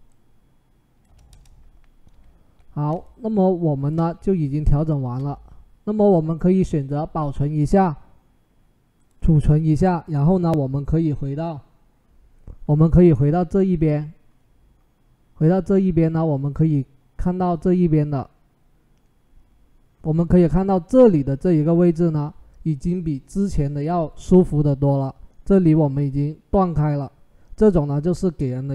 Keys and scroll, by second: 1.1 Return.